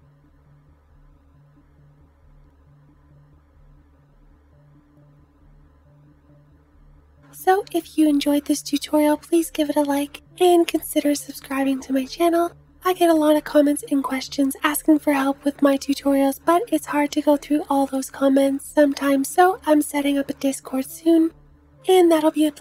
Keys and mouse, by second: 0.4 middle click, 0.4 right click, 1.1 click, 1.3 space, 1.4 space, 1.4 space, 1.6 click, 2.3 click, 2.6-7.4 typing, 2.7 click, 2.9 click, 4.0 Left, 4.2 Tab, 4.7 ctrl+s, 4.8 Tab, 4.9 click, 5.1 click, 5.7 Left, 5.8 Left, 5.9 click, 6.1-13.3 drag, 6.1 middle click, 6.1 right click, 6.3 middle click, 6.3 right click, 7.3 middle click, 7.3 right click, 7.4 middle click, 7.4 right click, 13.3 right click.